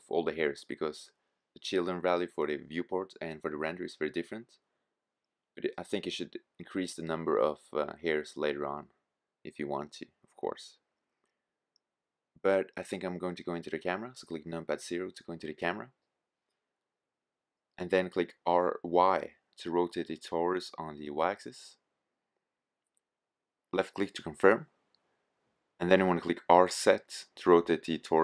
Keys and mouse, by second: 1.4 middle click, 8.7-9.9 middle drag, 12.3 middle click, 13.3 KP_0, 16.9 r, 23.9-25.2 middle drag, 25.5 r.